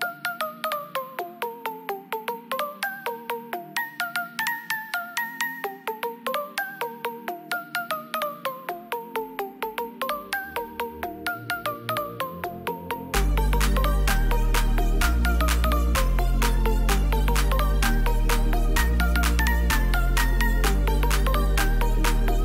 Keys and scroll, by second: 14.4 shift+F5.